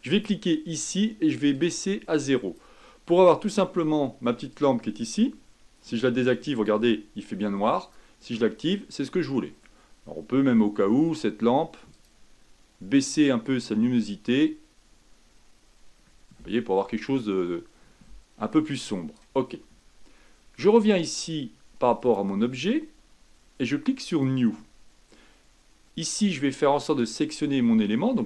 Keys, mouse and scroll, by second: 1.7-4.6 drag, 6.6 click, 7.8 click, 9.0-13.3 middle drag, 13.3-16.0 drag, 22.1 click, 24.2-26.9 drag.